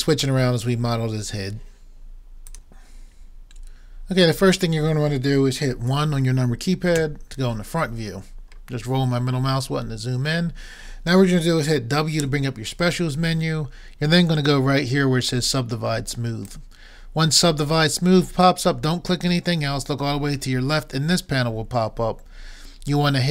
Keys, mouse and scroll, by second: 6.9 KP_1, 10.1-12.3 middle drag, 12.3 w, 12.9 right click.